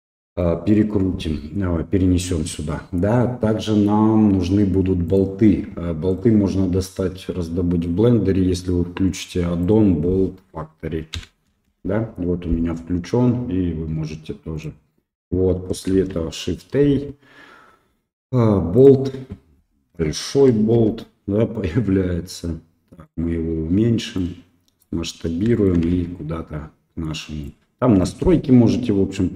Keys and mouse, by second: 5.1-6.2 drag, 15.9 shift+a, 20.2 shift+middle drag, 24.1 click, 25.5 shift+middle click, 25.9 s, 28.0-29.3 drag.